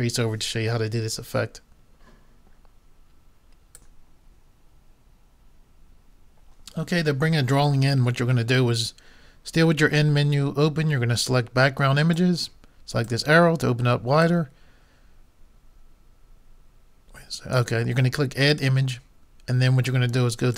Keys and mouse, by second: 3.8-5.6 drag, 12.2-16.0 drag, 18.5-20.4 drag, 20.5 click.